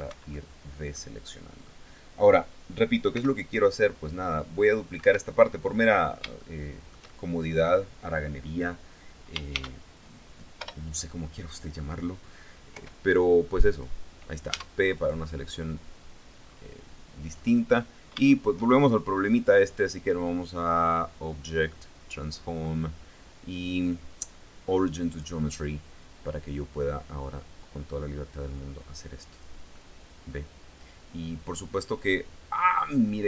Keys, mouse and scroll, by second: 2.6 c, 3.4-4.7 drag, 4.6 Escape, 5.0 click, 6.0-7.3 shift+drag, 9.1 shift+d, 10.2 Return, 12.3 p, 13.2 click, 14.0 Tab, 14.5 right click, 16.0-16.3 scroll down 2, 16.8-17.2 scroll up 2, 19.4 click, 24.7 click, 26.1-29.2 drag, 29.3-31.8 middle drag.